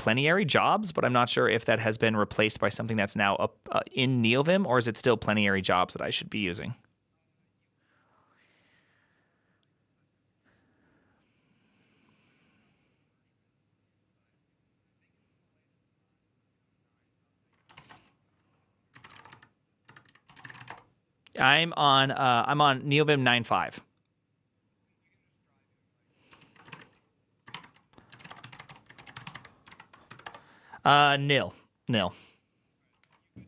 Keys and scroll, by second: 18.6-20.9 typing, 26.2 ctrl+a, 26.6-30.6 typing.